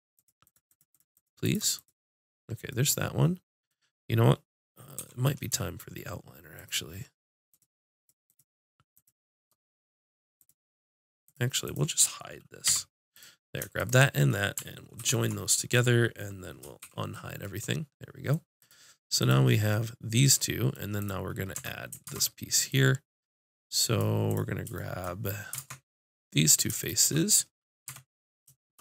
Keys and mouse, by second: 0.1 right click, 0.5-5.0 drag, 5.0 n, 6.6-12.7 drag, 12.7 h, 15.0 ctrl+j, 16.8 alt+h, 18.6-20.9 drag, 21.0 click, 21.5 Tab, 21.8 click, 22.0 ctrl+Tab, 26.5-27.8 drag, 27.8 Tab.